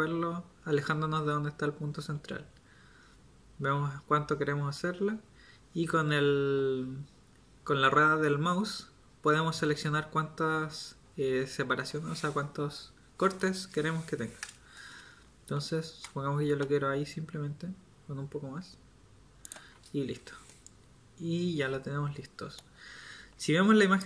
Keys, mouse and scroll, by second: 19.9 Tab.